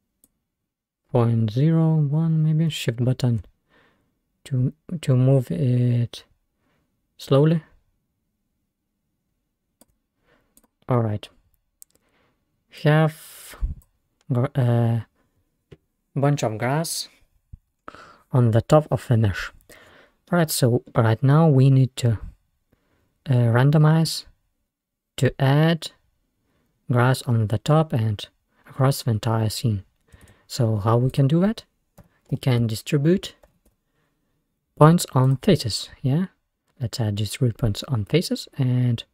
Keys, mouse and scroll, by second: 0.3-3.5 drag, 10.3-10.6 scroll down 1, 10.6 drag, 10.9-12.0 scroll up 3, 12.8-16.2 drag, 17.0-17.5 scroll down 3, 17.9-18.8 scroll up 5, 18.8-19.5 scroll down 1, 19.7 scroll down 1, 19.8-22.9 middle drag, 30.3 shift+a, 35.4-37.5 drag.